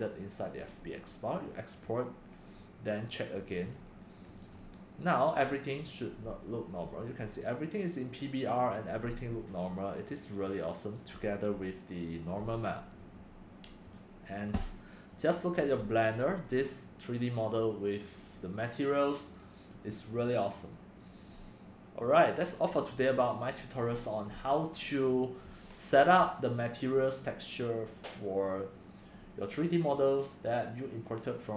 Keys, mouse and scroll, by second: 1.4 click, 1.8 click, 4.2 click, 4.7 click, 6.1-11.8 middle drag, 12.6 right click, 13.5 click, 14.0-15.8 drag, 15.8-16.5 middle drag, 15.8 scroll, 16.8 middle click, 17.0 middle click, 17.3-17.7 middle drag, 18.0-20.0 drag, 21.7 middle click, 21.9 middle click, 22.3-24.3 drag, 26.9-27.9 drag.